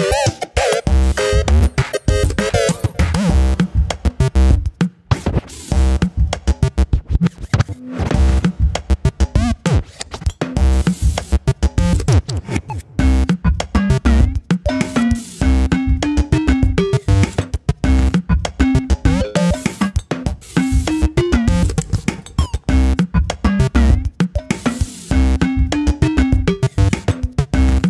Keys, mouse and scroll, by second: 0.4-2.1 drag, 2.1 g, 3.9 g, 7.4-8.4 drag, 8.7-9.3 middle drag, 9.3-9.6 scroll down 1, 9.6 drag, 9.9 scroll up 1, 10.0-10.4 middle drag, 10.4 r, 11.8 middle click, 12.1 click, 12.3-12.8 middle drag, 12.8 click, 13.4 click, 14.2 click, 15.6 click, 19.2-20.2 scroll up 2, 20.6 click, 24.1-25.1 scroll down 1, 25.1-26.2 drag.